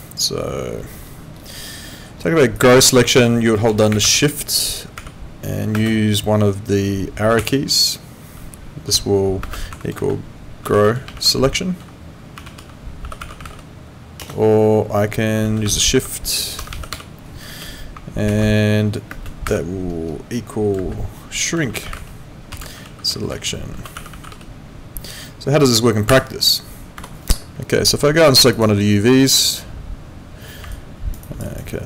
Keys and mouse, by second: 27.0 Escape, 28.5 click, 30.7 alt+right click, 31.2 alt+click, 31.4 alt+right click, 31.7 alt+middle click.